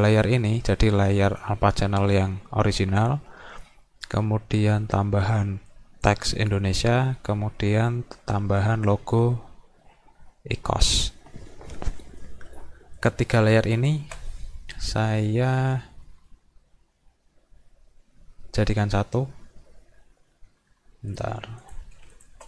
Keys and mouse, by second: 0.6 click, 5.7 click, 8.6 click, 13.0 click, 13.8 shift+click, 16.1 right click, 21.1 click, 21.6 click, 22.2 shift+click.